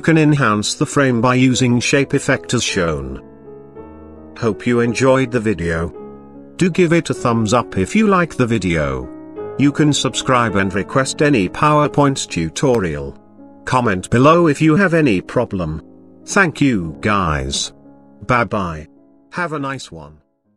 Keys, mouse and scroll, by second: 0.8 click, 8.9 click, 9.9 click.